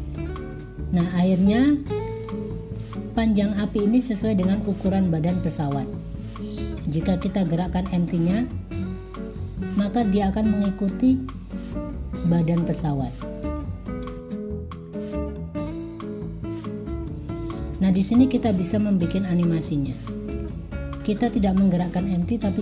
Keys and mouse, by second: 2.3 click, 7.0 click, 8.4 click, 15.1 click.